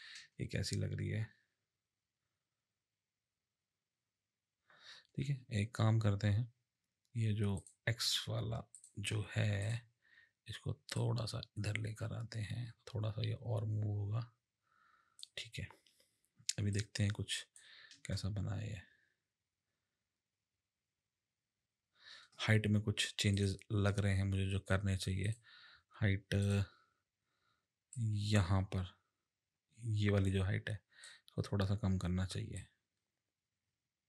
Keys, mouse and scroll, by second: 0.2 space, 5.2 space, 7.6 click, 8.7 click, 9.6 click, 11.0 click, 16.7 click, 17.9 space, 22.2 space, 23.3 click, 25.2 click, 26.4 click, 27.9 click, 32.6 click.